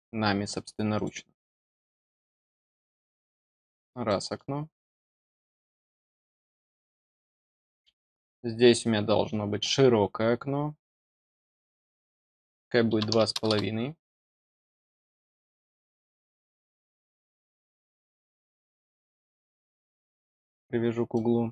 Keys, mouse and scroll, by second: 0.9 click, 2.6 click, 3.5 scroll down 2, 4.0 middle click, 5.2 click, 6.4 middle click, 6.9-7.2 scroll down 4, 7.9 scroll up 2, 11.2 click, 20.3 click, 21.0 middle click.